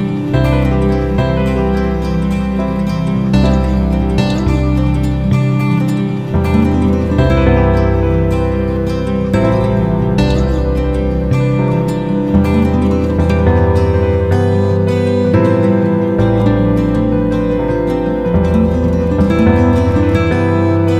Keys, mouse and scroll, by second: 12.4 click, 15.3 ctrl+g, 17.3 click, 20.1-20.9 typing.